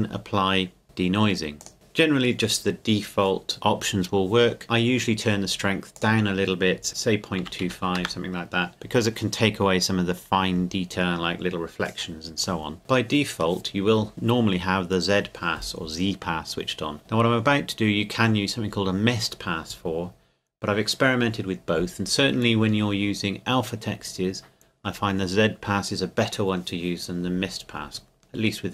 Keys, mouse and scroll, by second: 0.8 click, 5.9 click, 6.9 KP_Decimal, 7.4 KP_2, 7.6 KP_5, 8.0 KP_Enter, 9.5 KP_Enter, 12.8 click.